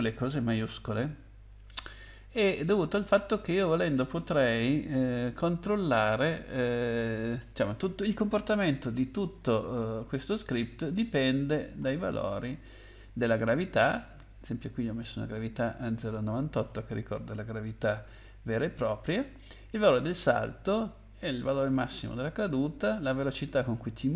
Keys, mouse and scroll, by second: 5.0 Escape, 6.4 click, 9.1-9.9 scroll down 8, 10.8 scroll up 3, 11.9 scroll up 5, 13.6 click, 13.8 click, 15.2 click, 20.0 click, 20.2 click, 20.3 double click, 21.4 double click, 21.6 double click, 21.7 double click, 23.1 double click, 23.3 click, 23.4 double click.